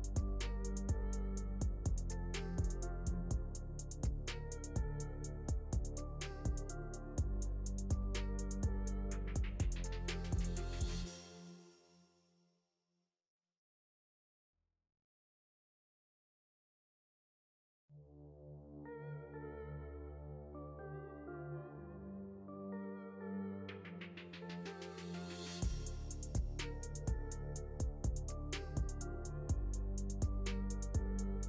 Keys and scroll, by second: 3.3 c, 5.6 shift+F2, 9.6 Caps_Lock, 11.3 m.